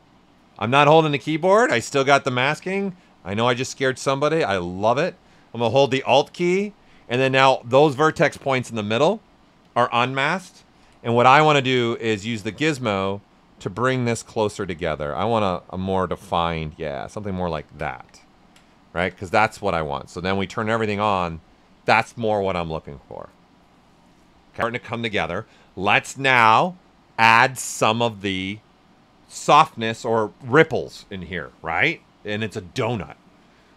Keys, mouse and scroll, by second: 2.7 space, 10.7 d, 11.2 ctrl+right click, 11.8 w, 12.6 alt+right click, 13.2-15.2 drag, 15.2-17.5 drag, 17.9 q, 18.2 ctrl+right click, 18.6 right click, 19.4 right click, 20.2 click, 20.7 right click, 24.8-28.6 right drag.